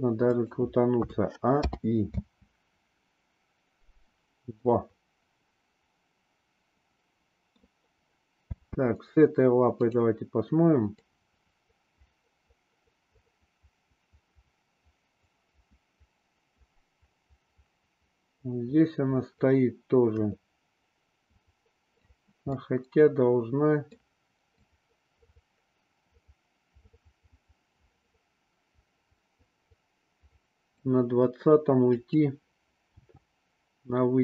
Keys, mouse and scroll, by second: 0.9 a, 1.7 i, 2.1 space, 4.5-7.5 middle drag, 8.5 space, 9.8 click, 10.9-22.0 drag, 22.4-23.9 middle drag, 24.5-30.8 drag, 31.9 click, 32.8 g.